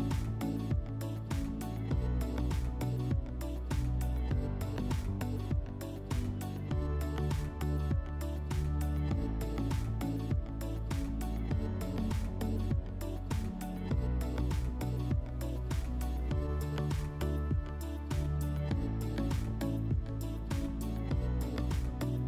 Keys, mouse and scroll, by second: 3.2 click, 6.5-7.0 scroll, 7.0 click, 8.9 shift+click, 10.3 click, 11.7-12.3 scroll, 13.0 click, 14.7 shift+click, 15.7-16.3 drag, 17.9 typing, 18.1 Tab, 19.2 click.